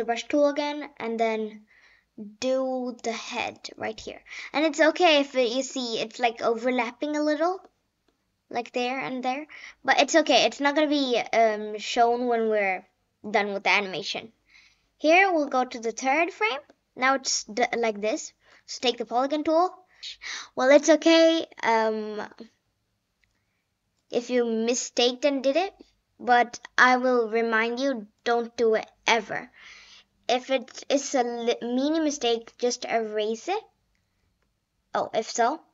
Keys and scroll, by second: 20.0 ctrl+z.